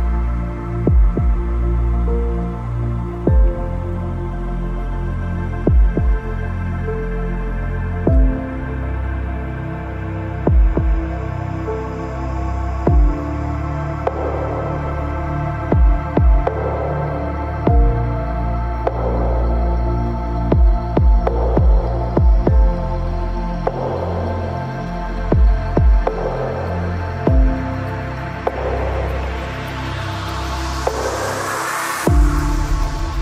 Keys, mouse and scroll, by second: 1.0 ctrl+Tab, 1.8-3.7 right drag, 2.2 c, 3.4 ctrl+Tab, 5.2 g, 7.1-9.9 right drag, 7.3 g, 8.4 g, 9.4 ctrl+Tab, 10.4 c, 14.3-16.0 right drag, 14.4 ctrl+s, 15.6 KP_Decimal, 16.8 e, 18.1 z, 18.6-20.4 drag, 19.6 KP_6, 19.9 KP_3, 22.2 z, 22.9 ctrl+z, 23.2 ctrl+z, 24.2 e, 25.2 middle click, 25.6 z, 26.0-27.6 drag, 26.9 KP_3, 27.8 x, 28.9 Tab, 29.5 z, 31.7 Tab.